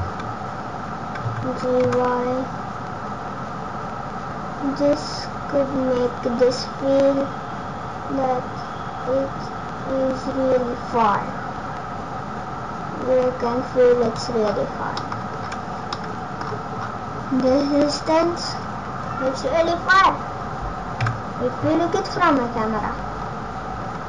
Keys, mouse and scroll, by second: 1.2 g, 14.4-15.0 scroll down 3, 15.0 middle click, 15.0-16.0 scroll down 5, 15.9 middle click, 16.4-16.8 scroll down 2, 18.7 scroll up 1, 19.2 scroll down 2, 19.7 scroll down 2, 20.1 scroll up 6, 21.0 KP_0, 22.1-22.5 scroll up 5, 23.1 scroll down 1, 23.3-23.9 scroll down 5.